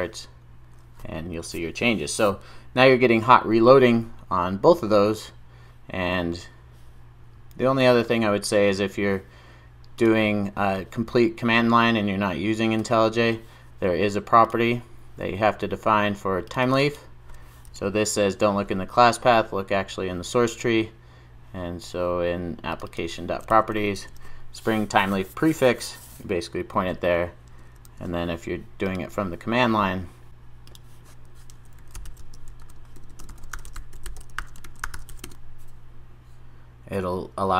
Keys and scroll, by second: 10.1 super+F2, 23.5 super+v, 23.9 super+s.